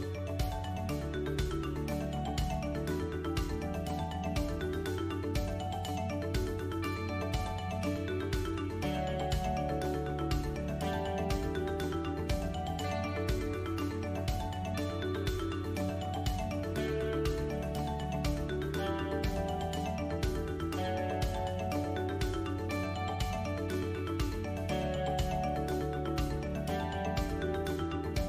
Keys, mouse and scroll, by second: 1.3 g, 4.2 middle click, 8.1 shift+right click, 9.8 click, 11.8 KP_3, 13.1 middle click, 14.0 click, 14.8-17.4 typing, 20.6 middle click, 22.8 a, 23.5 click, 25.6 Tab, 26.1-26.5 scroll down 1, 26.5 middle click, 27.1 click, 27.8 KP_7.